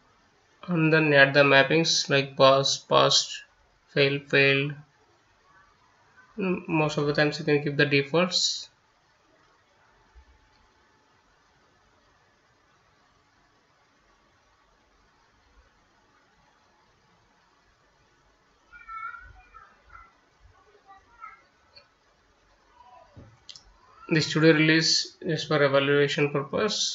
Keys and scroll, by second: 20.1-26.9 typing.